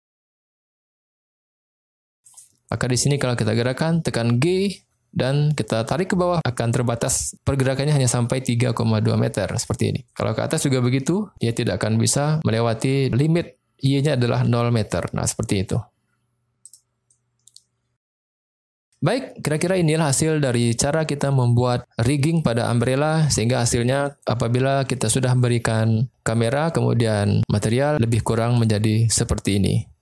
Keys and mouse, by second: 2.3 drag, 3.1 click, 4.1 g, 16.7 click, 17.1-18.1 middle drag, 18.4-18.8 middle drag.